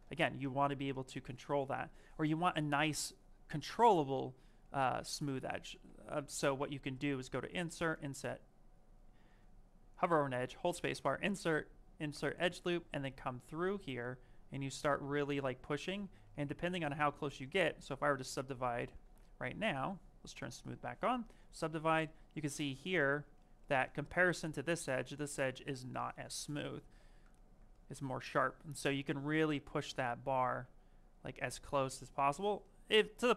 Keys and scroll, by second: 0.0 ctrl+shift+z, 5.1 ctrl+z, 6.1 space, 9.7 space, 22.2 shift+f, 26.1 shift+f, 26.9 shift+f.